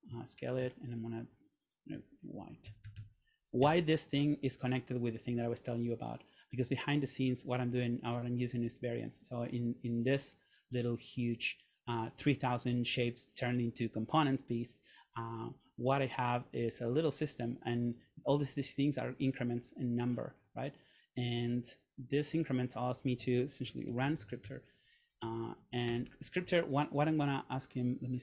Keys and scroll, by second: 2.7 shift+f, 3.7 Return, 24.0 super+/, 24.2-25.1 typing, 25.3 Down, 26.0 Return.